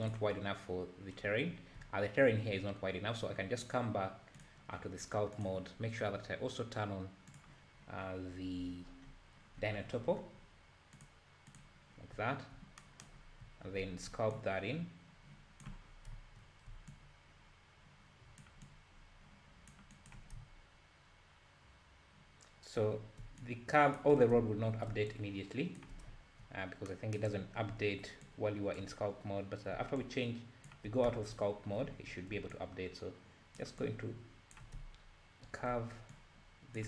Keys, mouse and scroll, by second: 0.0 click, 0.3-0.6 scroll down 4, 1.1-1.8 scroll up 3, 4.4 click, 5.3-8.0 drag, 8.0-9.0 scroll down 8, 9.0-9.6 scroll up 5, 9.6-11.0 scroll down 14, 11.0 click, 11.6 click, 12.2 `, 13.2 scroll up 3, 13.4 `, 14.4-15.9 ctrl+drag, 15.9 scroll down 1, 16.2 `, 16.9-20.4 ctrl+drag, 20.4 `, 23.4 ctrl+click, 25.1 ctrl+click, 26.6-26.9 scroll down 2, 27.4-28.2 scroll up 2, 28.3 ctrl+click, 29.0-29.9 scroll down 1, 29.9 scroll down 1, 30.0-31.1 ctrl+drag, 31.1 `, 31.6 scroll up 3, 31.8 `, 32.5-34.8 ctrl+drag, 34.8 `, 36.1 ctrl+click.